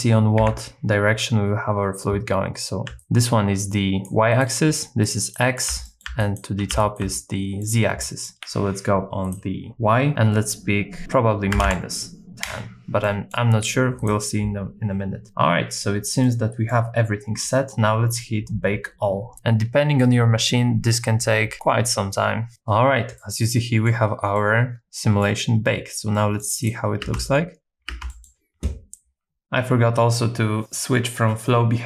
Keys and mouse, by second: 0.4 KP_7, 2.9 d, 3.0-4.1 drag, 4.1-6.7 typing, 4.3 right click, 5.0 click, 5.4 right click, 5.9 middle click, 6.2 click, 6.8 right click, 7.1 middle click, 8.0 middle click, 9.2-12.5 drag, 13.1 middle click, 14.0 click, 16.3 middle click, 23.2 middle click, 24.3-25.6 middle drag, 26.1 middle click, 27.1 space, 28.0 space, 28.1 middle click, 29.4-31.8 drag.